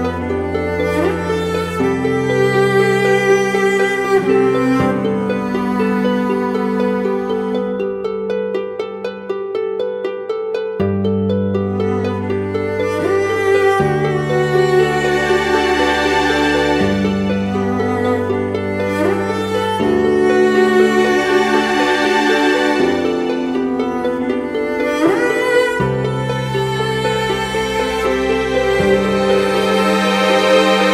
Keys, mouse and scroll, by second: 3.3 alt+shift+click, 4.8 shift+Return, 6.9 ctrl+-, 7.9-8.3 alt+scroll up 1, 10.1 ctrl+click, 15.3 right click, 29.4 alt+right click, 29.9-30.5 scroll down 1.